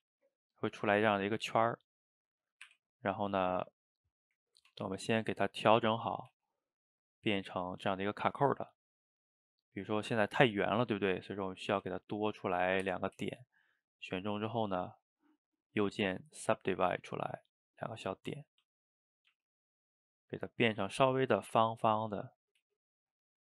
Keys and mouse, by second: 0.0 s, 0.7 middle click, 1.5 g, 2.7 r, 3.8-4.7 middle drag, 4.7 Tab, 5.8 click, 6.3 g, 7.9 click, 9.3 shift+click, 9.9 shift+click, 11.3 click, 11.7 g, 13.5 shift+click, 14.1 shift+click, 14.6-17.3 right drag, 17.3 click, 18.7 s, 20.4 click, 20.7 s, 22.5 click, 22.6 g.